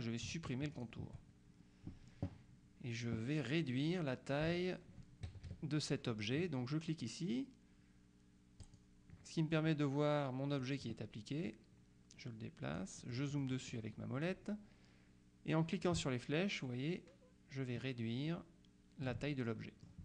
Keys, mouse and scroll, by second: 0.8 shift+click, 5.4 KP_Subtract, 8.7 click, 10.7 click, 11.6-14.3 drag, 16.0-19.6 ctrl+drag.